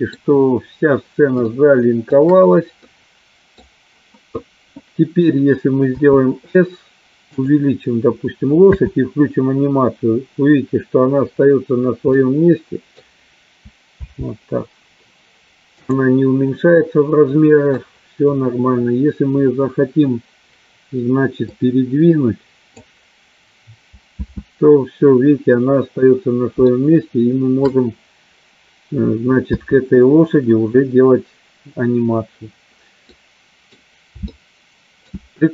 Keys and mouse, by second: 1.6 shift+middle click, 3.0 middle click, 6.1 s, 9.0 space, 12.6 middle click, 14.6 space, 16.2 click, 17.0 middle click, 21.6-23.0 drag, 24.2 space, 27.4-28.4 shift+middle drag, 30.0 space, 33.3 middle click, 34.3 space, 34.7-35.5 middle drag.